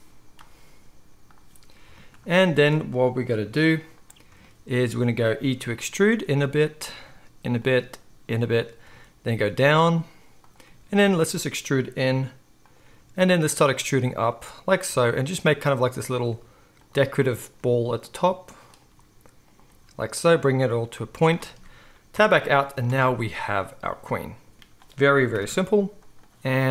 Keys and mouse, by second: 3.4 KP_1, 5.6 e, 6.8 e, 7.8 e, 8.3-13.6 drag, 8.8 e, 10.6 e, 11.3 e, 12.8-18.2 typing, 13.6-14.7 right drag, 14.7-19.4 drag, 19.4-26.7 right drag, 19.4 e, 19.7 e, 20.9 z, 22.1 Tab, 22.8 alt+a, 25.3 KP_1.